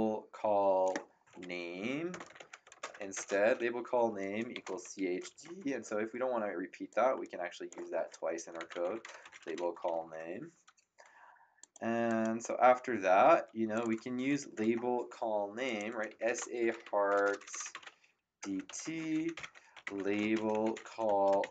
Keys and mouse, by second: 1.9-5.8 typing, 6.9 click, 8.3-10.6 typing, 11.6 click, 13.7 click, 14.4 Return, 15.6 click, 15.8-21.5 typing.